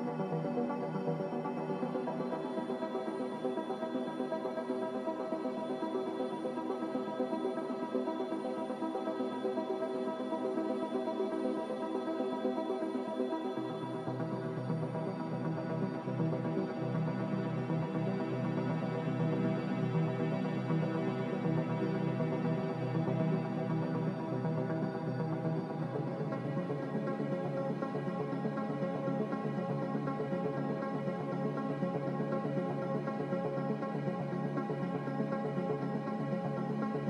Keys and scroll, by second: 1.6 typing, 1.9 Return, 6.8 ctrl+z, 10.0 ctrl+z, 10.5 ctrl+z, 11.0 ctrl+z, 11.5 ctrl+z, 12.1 ctrl+z, 13.7 ctrl+y, 21.0 b, 23.1 typing, 24.2-25.2 typing, 29.4-30.6 typing.